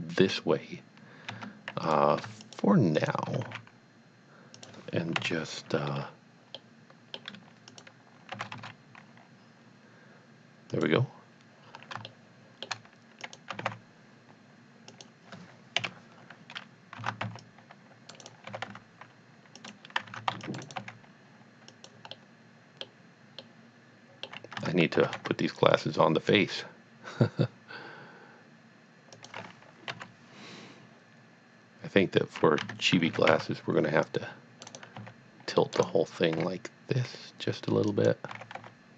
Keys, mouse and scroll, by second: 1.3 Tab, 1.9 click, 2.4 shift+click, 3.0 shift+double click, 3.4 g, 3.6 z, 4.6 click, 5.2 KP_1, 6.5 middle click, 6.9 middle click, 7.6 middle click, 7.7 click, 8.3 g, 9.1 z, 10.8 click, 11.7-12.0 scroll down 1, 12.1 shift+middle click, 13.2 click, 13.5 g, 13.8 x, 14.9 click, 15.8 KP_7, 17.0 alt+a, 17.4 c, 17.4 click, 18.3 right click, 18.5 g, 18.7 y, 19.6 click, 20.1 alt+a, 20.5 click, 20.6 right click, 20.8 g, 21.8 click, 22.1 middle click, 22.3 middle click, 23.4 middle click, 24.6 Tab, 26.4 y, 29.1 y, 29.2 click, 29.9 KP_3, 32.6 KP_3, 33.0 alt+a, 33.4 scroll down 1, 34.0 click, 34.8 right click, 35.0 c, 35.6 middle click, 35.8 right click, 36.4 r, 37.9 click, 38.3 g, 38.6 y.